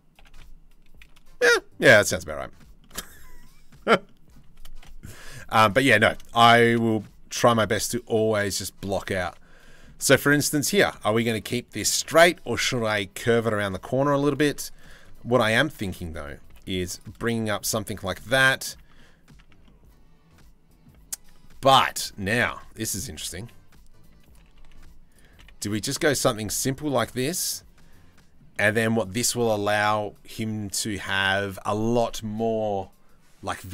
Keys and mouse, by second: 1.9 middle click, 2.4 shift+middle click, 3.0 middle click, 3.7 middle click, 4.5 KP_7, 4.7 z, 6.0 shift+middle click, 6.9 a, 7.1 g, 9.3 click, 9.6 z, 10.0 click, 10.6 shift+middle click, 10.9 click, 13.3 click, 14.2 ctrl+r, 15.4 3, 15.6 click, 16.1 g, 16.8 click, 17.3 z, 17.8 click, 18.5 Tab, 18.6 click, 19.0 Tab, 19.3-20.5 drag, 21.9 a, 22.2 s, 22.8 s, 24.0 g, 24.9 s, 25.7 g, 26.9-28.0 middle drag, 28.2 middle click, 29.4 middle click.